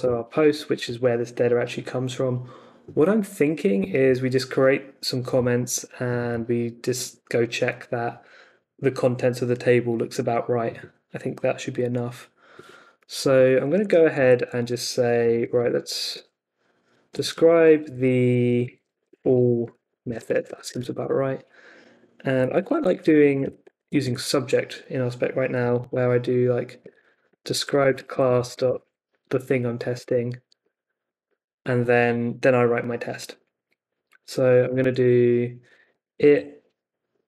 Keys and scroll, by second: 0.0 Return, 13.6-15.9 typing, 16.1 Tab, 17.1-23.8 typing, 17.8 Left, 24.0 Left, 25.3-29.2 typing, 26.8 Tab, 30.6 o, 31.0 Escape, 31.2 o, 34.8 space, 36.0 shift+', 36.3 Left, 37.1-37.2 typing.